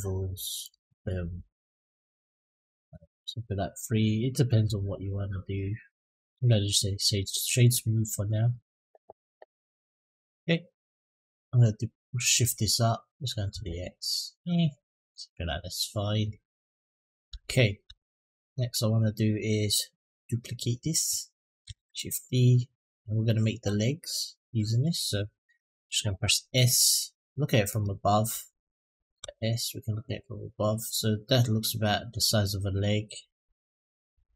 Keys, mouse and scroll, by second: 2.6 click, 2.9 click, 4.8-5.7 middle drag, 6.0-6.9 right drag, 7.7 middle click, 8.4 click, 9.6 click, 10.6-12.2 drag, 12.9 click, 14.3-16.0 drag, 16.3-17.1 middle drag, 17.3 shift+middle drag, 17.8 middle click, 21.4 shift+d, 25.0 s, 27.5 click, 29.0 s, 32.2-34.3 drag.